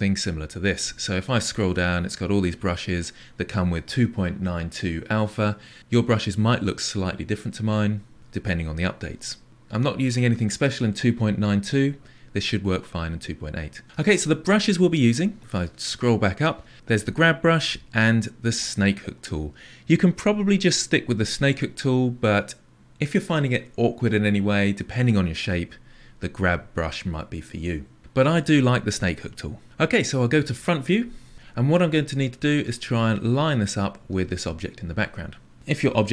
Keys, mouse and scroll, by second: 21.6-30.5 drag, 30.5 KP_1.